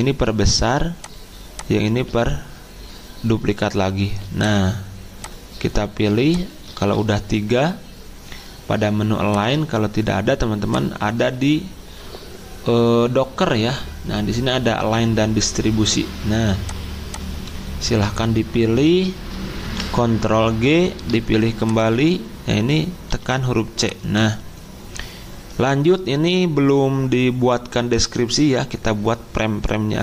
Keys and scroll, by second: 6.7 ctrl+z, 19.6 ctrl+g, 23.1 c.